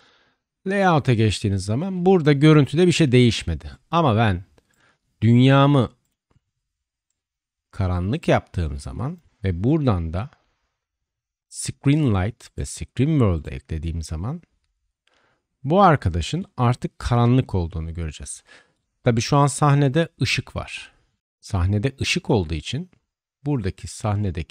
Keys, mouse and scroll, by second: 0.0-9.2 middle drag, 9.2 click, 9.2 middle click, 9.6-13.4 drag, 13.4-24.5 middle drag.